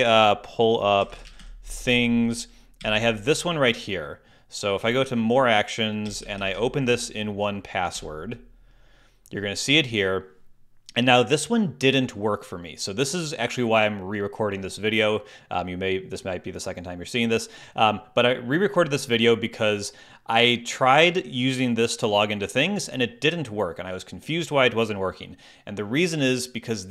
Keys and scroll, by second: 0.8-1.9 typing, 2.8 Down, 4.8 Right, 6.0 Down, 7.9 Return.